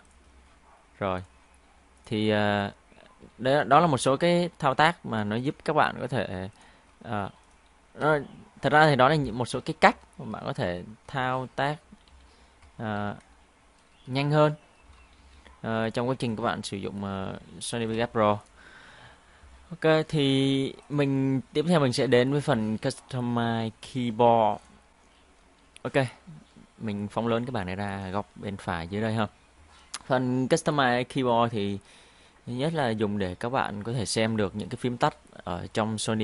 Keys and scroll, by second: 9.9 ctrl+q, 10.8 ctrl+q, 12.1 shift+q, 13.0 shift+q, 15.2 ctrl+shift+q.